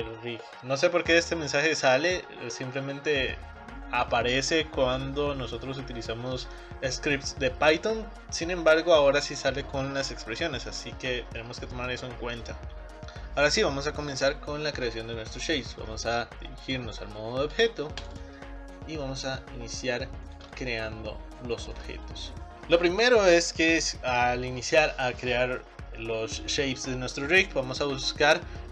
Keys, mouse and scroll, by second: 0.0 click, 16.7-18.1 drag, 18.2 click, 18.8 scroll up 4, 19.0-20.2 middle drag, 20.2 scroll down 1, 20.4 shift+middle click, 21.1-21.6 scroll up 2, 21.6 shift+middle click.